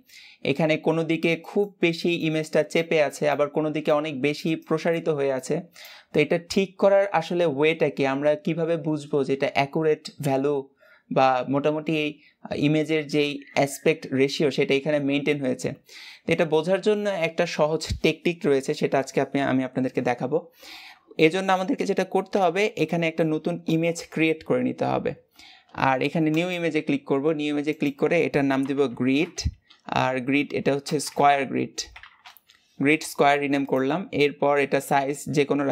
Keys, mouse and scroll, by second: 33.5-35.7 drag.